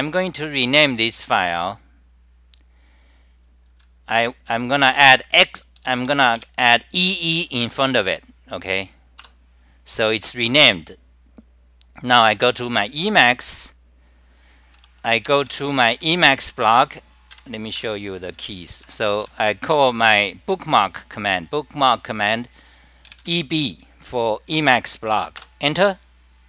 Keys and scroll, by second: 17.6-18.4 typing, 26.3 Return.